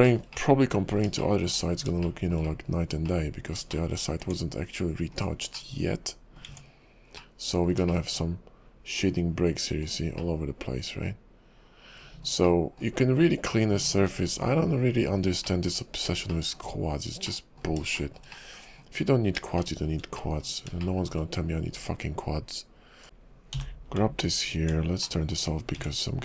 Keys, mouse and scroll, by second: 0.0 middle click, 0.3 middle click, 1.2 shift+middle click, 1.7 scroll up 3, 2.0 shift+middle click, 2.5-3.0 scroll up 3, 3.0 middle click, 3.7-4.2 shift+scroll up 3, 3.8 shift+middle click, 4.2 Tab, 5.1 click, 5.5 middle click, 6.4 Tab, 7.2 middle click, 8.0 shift+middle click, 10.2 shift+middle click, 12.4 middle click, 12.9-15.4 scroll down 38, 15.4 middle click, 15.4-15.8 scroll down 2, 15.8 scroll up 4, 16.3 shift+middle click, 16.7 scroll up 2, 17.2 middle click, 17.9 middle click, 18.3 middle click, 19.1-19.5 scroll up 3, 19.6 middle click, 20.2 middle click, 20.8 shift+middle click, 23.0 click, 23.1 shift+click, 23.7 j, 24.0 Tab, 25.0 middle click, 25.8 Tab.